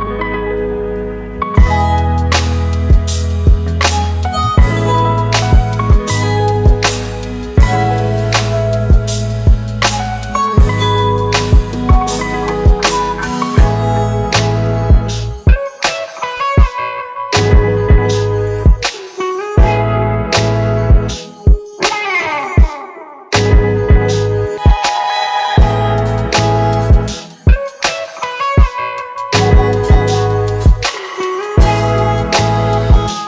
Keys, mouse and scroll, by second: 0.6-3.8 scroll down 1, 20.4-21.4 typing, 21.7 double click, 27.1 typing, 27.7 double click.